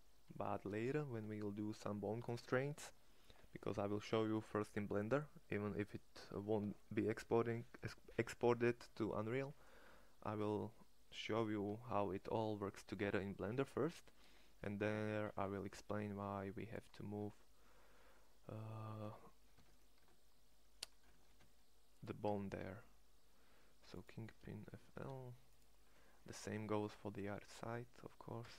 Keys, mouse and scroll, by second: 0.5 shift+s, 19.4 Tab, 20.1 Tab, 20.1-21.2 scroll up 1, 21.2 scroll up 1, 21.2 shift+s, 22.3 Tab, 24.3 Tab, 24.8 shift+s, 28.3 Tab.